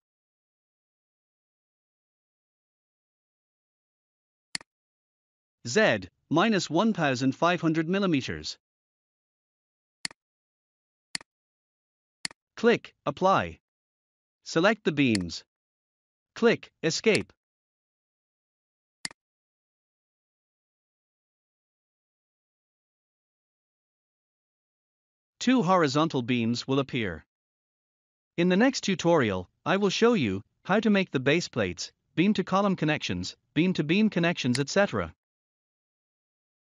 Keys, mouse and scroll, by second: 1.1 0, 4.4 click, 6.4-8.6 typing, 9.9 click, 15.0 click, 17.0 click, 18.9 click, 19.6 scroll up 1, 20.6 scroll down 1, 21.3-22.0 scroll up 1, 22.0 middle click, 23.4 scroll down 1, 24.0-24.5 scroll up 1, 24.5 middle click, 25.3 scroll up 1, 25.8 scroll down 1, 26.2 scroll up 1, 34.4 click.